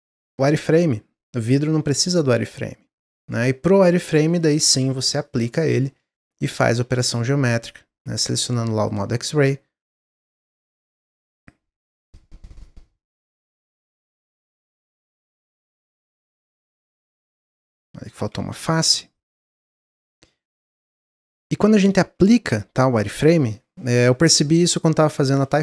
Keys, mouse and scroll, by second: 2.9 click, 4.3-6.8 drag, 6.8 Tab, 7.2-9.4 drag, 10.5 shift+click, 11.2-12.5 shift+drag, 14.0 shift+click, 14.6 shift+click, 15.5 x, 16.3 Tab, 16.5-17.0 middle drag, 17.0 scroll up 1, 17.4 middle click, 17.6 Tab, 18.0 click, 18.6 x, 19.4 middle click, 19.7 scroll up 1, 20.0 middle click, 20.2-20.6 scroll up 1, 20.6-21.1 middle drag, 21.1 Tab, 21.3 scroll down 1, 21.6 middle click, 22.0 a.